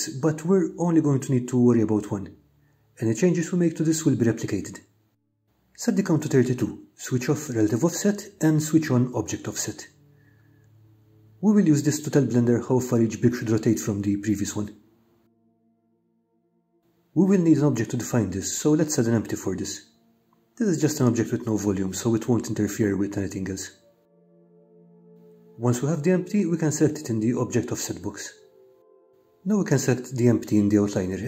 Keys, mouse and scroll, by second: 1.5-3.6 drag, 6.2-8.4 drag, 13.5 click, 16.0 click, 16.8 click, 20.0 shift+a, 24.0 KP_7, 27.1-28.3 drag, 29.7 click.